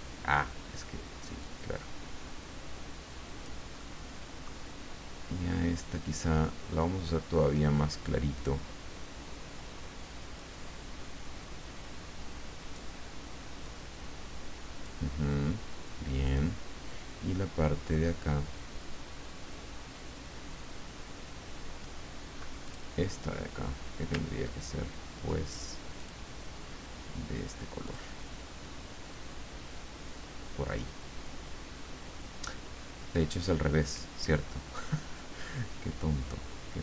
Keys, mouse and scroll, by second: 1.4-3.6 drag, 3.8 middle click, 10.4-12.9 drag, 13.6-15.7 drag, 16.2 click, 22.6 click, 26.0 click, 27.8 click.